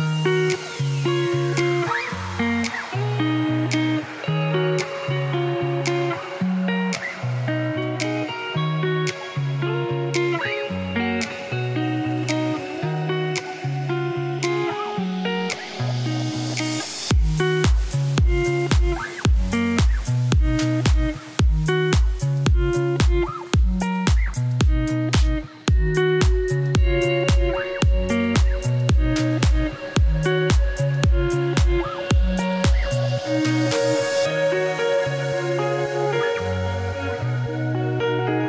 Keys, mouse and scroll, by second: 0.7 Tab, 2.0 KP_1, 2.8 g, 5.5 KP_3, 5.9 KP_1, 6.5 g, 8.7 click, 9.0 g, 12.5 ctrl+alt+shift+s, 17.2 click, 17.3 g, 19.5 shift+click, 19.9 ctrl+b, 23.9 click, 24.0 shift+click, 24.3 ctrl+b, 28.3 Tab, 28.4 g, 32.7 1, 32.8 click, 34.2 click, 34.4-37.2 typing, 35.1 click, 36.2 shift+middle click, 36.4 scroll up 1, 36.9 ctrl+z.